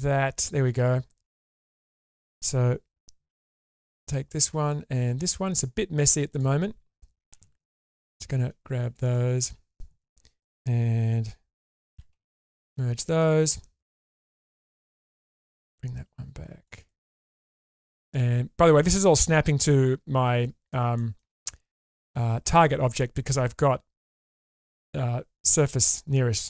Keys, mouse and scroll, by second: 2.1 click, 3.3 4, 4.6 click, 5.0 4, 6.3 click, 7.3 alt+z, 8.1 click, 8.9 shift+click, 9.4 alt+z, 11.9 m, 12.5 click, 13.2 middle click, 14.0-14.4 scroll up 2, 14.4 shift+middle click, 15.0 click, 15.4-16.6 drag, 16.8-20.7 middle drag, 21.0 shift+middle click, 21.4 middle click, 22.3-23.2 scroll down 1.